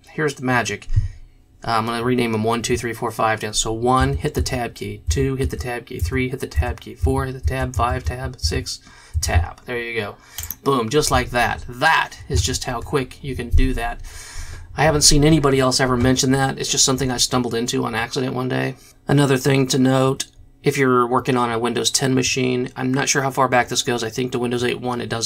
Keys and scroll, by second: 4.0 KP_1, 4.3 Tab, 5.0 KP_2, 5.4 Tab, 6.0 KP_3, 6.5 Tab, 7.0 n, 8.0 Tab, 8.4 KP_5, 9.1 Tab.